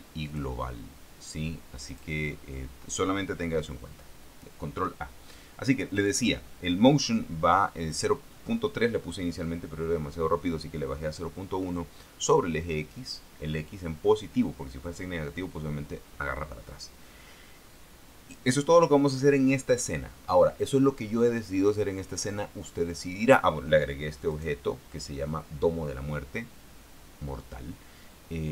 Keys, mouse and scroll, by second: 0.6 click, 2.2 click, 24.7 right click.